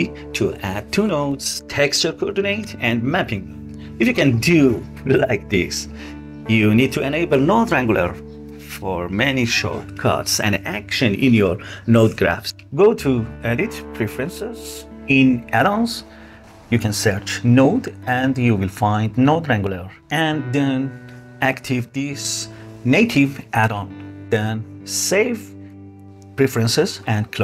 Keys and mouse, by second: 12.6-13.7 drag.